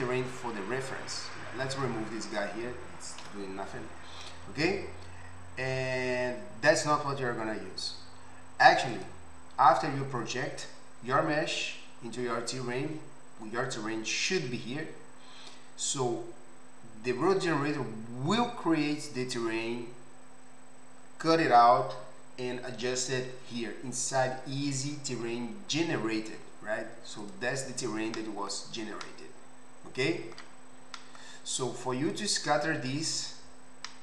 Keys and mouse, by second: 2.4-8.9 middle drag, 3.3 Delete, 8.9 click, 9.0-27.2 middle drag, 27.2 click, 27.3-32.1 middle drag, 32.1 click, 32.3-34.0 middle drag.